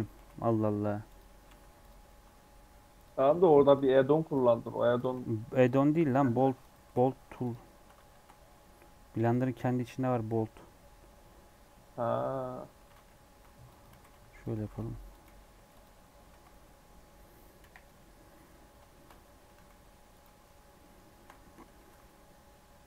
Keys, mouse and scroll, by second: 0.1 g, 1.3 scroll up 1, 1.4 s, 1.8 g, 3.2-6.8 typing, 8.0 shift+a, 12.8 s, 13.9 g, 14.5 s, 15.2 g, 16.2 alt+z, 16.4-17.5 middle drag, 17.5 KP_1, 17.8 KP_3, 18.4-18.8 scroll down 5, 18.8 shift+middle click, 19.1 scroll up 5, 20.7 shift+middle click, 21.4-21.7 scroll up 1, 21.7 g.